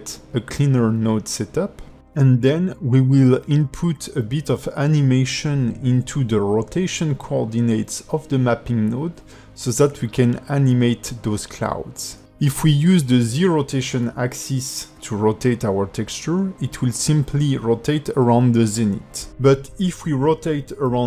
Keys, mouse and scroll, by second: 0.0-2.5 typing, 1.5 click, 1.5 shift+middle click, 1.8 shift+middle click, 2.1 click, 2.4 click, 2.7 shift+middle click, 2.8 ctrl+middle click, 2.9 shift+middle click, 3.5 click, 3.8 g, 4.9 shift+middle click, 5.5-6.1 scroll up 5, 9.4 click, 16.6 click, 20.3 click.